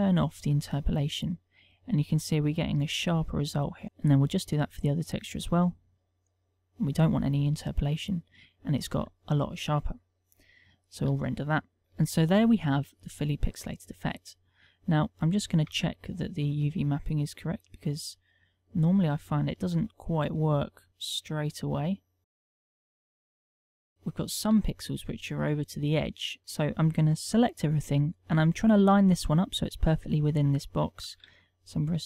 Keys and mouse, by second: 0.5 middle click, 2.6 middle click, 3.5 click, 3.8 click, 4.0 click, 4.7 middle click, 5.6 middle click, 6.6 click, 6.7 click, 7.0 middle click, 11.2 F12, 15.6 Tab, 16.8 click.